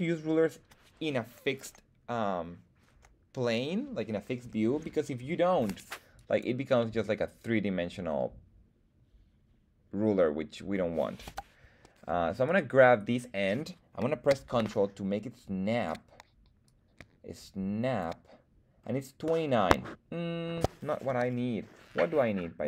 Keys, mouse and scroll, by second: 5.1 middle click, 6.1 click, 6.8-10.7 middle drag, 11.2 KP_1, 12.4-15.8 drag, 16.6-18.0 drag, 18.8-19.6 scroll up 1, 19.6 scroll up 1, 19.8 middle click, 21.1 KP_1.